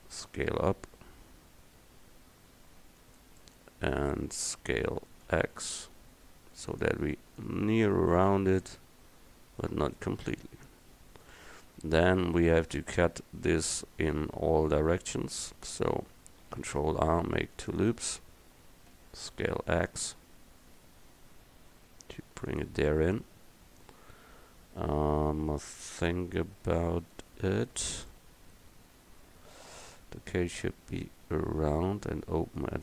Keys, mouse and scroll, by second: 0.2 s, 5.3 s, 7.4-11.7 drag, 15.3 Tab, 16.6 ctrl+r, 18.7 s, 23.2-25.0 middle drag, 28.2 middle click, 28.9 KP_1.